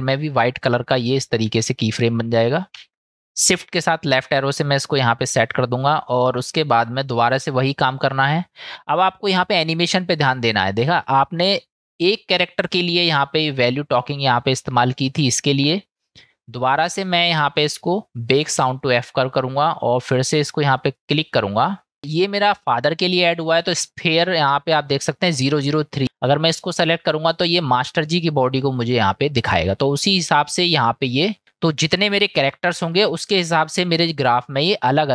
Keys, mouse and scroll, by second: 3.1 shift+Left, 9.4 click, 16.7-19.0 drag, 32.0-32.9 middle drag.